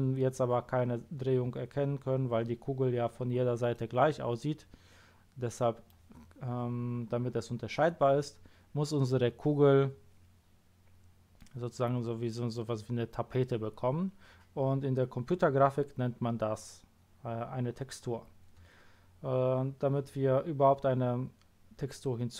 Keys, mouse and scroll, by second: 3.7-5.6 middle drag, 17.1-17.5 scroll down 2.